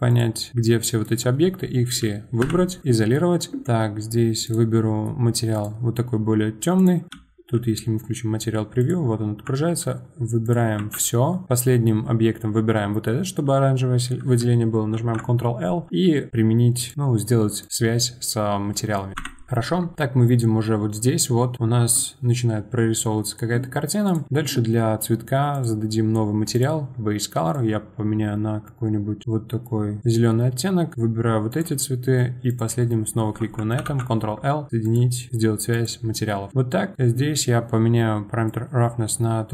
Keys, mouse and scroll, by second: 0.1 shift+click, 0.5-2.4 middle drag, 2.4 KP_Divide, 2.9-3.6 middle drag, 3.6 click, 4.4-6.9 drag, 7.1 middle click, 7.1 z, 8.8 click, 9.6 ctrl+a, 10.4 click, 10.8 a, 14.9 ctrl+l, 17.6 click, 18.7 middle click, 19.2 KP_Divide, 20.6-21.2 scroll up 4, 21.2-21.5 scroll down 4, 21.5-22.3 scroll up 1, 22.3 scroll up 1, 22.6-24.0 scroll down 1, 24.0 click, 24.3-25.5 middle drag, 25.5-27.5 drag, 30.9 shift+click, 31.5 shift+click, 32.5 shift+click, 35.0 ctrl+l, 35.3-35.7 middle drag, 35.7 click, 36.5 middle click, 36.9 click, 38.5-39.5 drag.